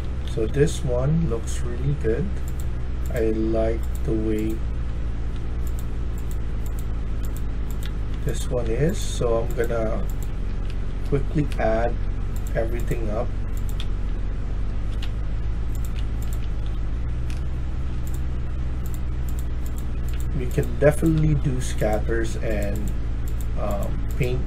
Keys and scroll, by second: 0.0-0.7 typing, 4.5-5.2 d, 6.7 d, 7.7 d, 8.3 d, 8.9 s, 10.2-12.0 typing, 13.5-14.9 typing, 16.6 typing, 19.8 a, 24.3-24.4 typing.